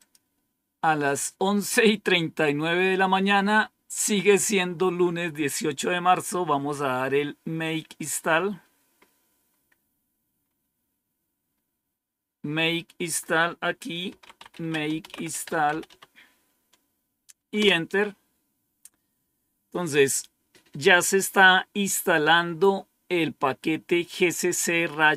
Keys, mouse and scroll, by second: 0.0 click, 8.8-11.4 scroll down 4, 11.4-12.2 scroll up 1, 13.0 click, 13.8-16.3 typing, 17.4 Return.